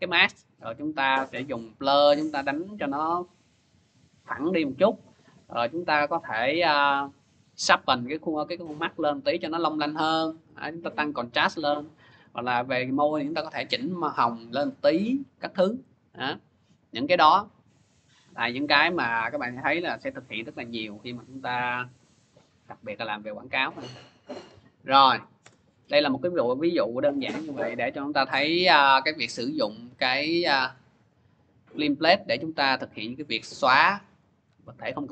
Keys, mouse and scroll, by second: 0.5 scroll, 20.8 click, 22.9 click, 24.0 click, 24.7 Delete, 25.2 Return, 27.7 click, 29.5 click, 30.6 click, 34.3 alt+Tab.